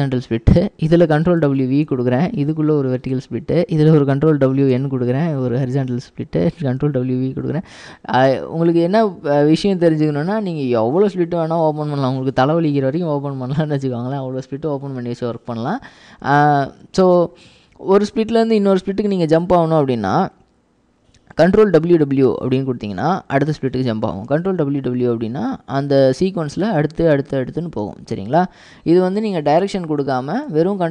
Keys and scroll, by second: 1.5 ctrl+w, 1.9 ctrl+v, 4.8 ctrl+w, 4.8 ctrl+n, 6.9 ctrl+w, 7.6 ctrl+v, 22.0 ctrl+w, 24.4 ctrl+w, 24.6 ctrl+w.